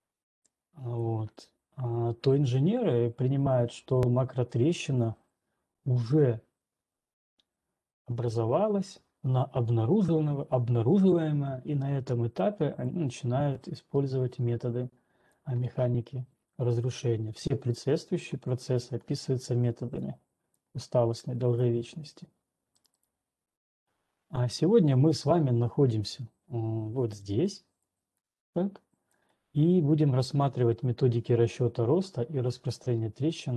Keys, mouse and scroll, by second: 1.4 ctrl+2, 1.4 right click, 15.9 right click, 22.0 ctrl+right click, 23.4 right click, 27.5 right click, 29.5 ctrl+2.